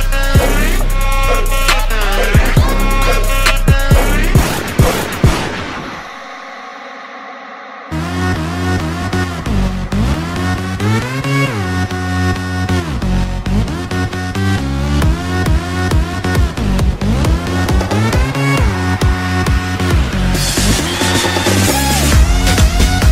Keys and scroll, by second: 1.0 ctrl+z, 6.5 ctrl+z, 7.3 ctrl+z, 7.7 ctrl+z, 8.3 ctrl+z, 9.6 ctrl+z, 10.4 ctrl+z, 10.7 ctrl+z, 11.3 ctrl+z, 13.2 ctrl+z, 14.0 ctrl+z, 17.5 ctrl+z, 18.3 ctrl+z, 20.7 space.